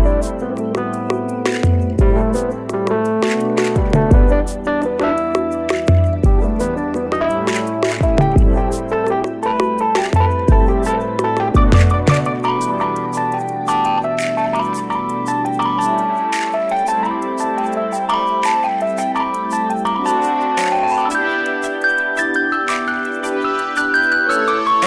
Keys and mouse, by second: 5.6 right click, 6.8 click, 8.4 right click, 10.9 right click, 11.0-13.7 drag, 16.8-17.3 click, 17.3-18.3 click, 18.3-19.9 drag.